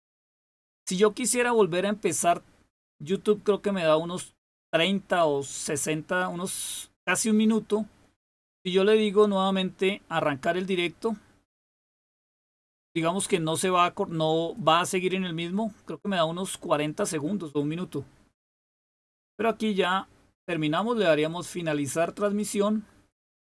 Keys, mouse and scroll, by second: 22.2 click.